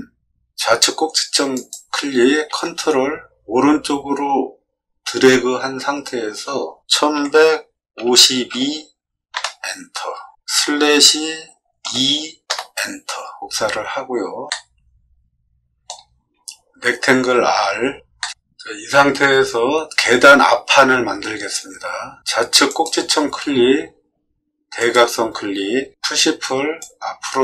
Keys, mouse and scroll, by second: 1.5 click, 6.9 1, 7.1 1, 7.9 5, 8.5 2, 9.3 Return, 10.5 /, 11.8 2, 12.4 Return, 14.4-15.8 middle drag, 17.3 r, 18.1 middle click, 22.6 click, 24.7 click, 26.7 click.